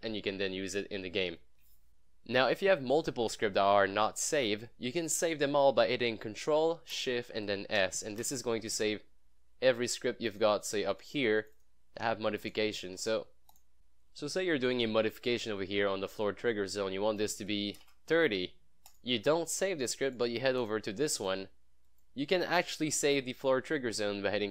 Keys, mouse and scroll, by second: 6.5-7.0 scroll down 1, 7.8 ctrl+shift+s, 10.4 click, 12.7-13.6 typing, 13.6 click, 16.6-17.5 drag.